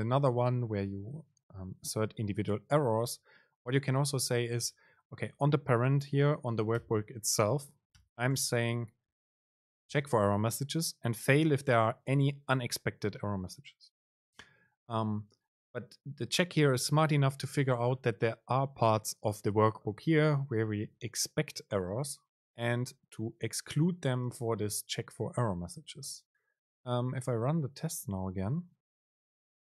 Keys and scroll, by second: 8.6 super+space, 27.9 super+r.